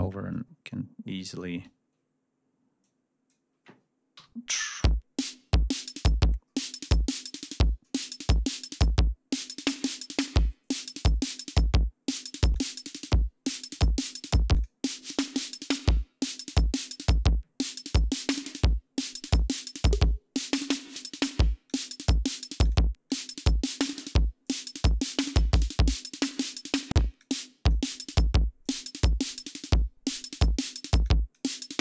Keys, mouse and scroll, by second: 0.8 scroll up 2, 2.7-3.3 drag, 4.6 l, 5.0-5.6 scroll up 1, 6.6 scroll down 2, 6.6 scroll up 2, 7.4 scroll down 2, 8.6 click, 11.1 click, 12.3 click, 13.5 click, 14.4 click, 15.2 click, 17.4 click, 18.2 click, 19.1 click, 20.6 click, 21.5 click, 22.4 click, 22.9 click, 24.3 click, 26.0 click, 27.0 click, 28.4 click, 30.1 click, 30.9 click.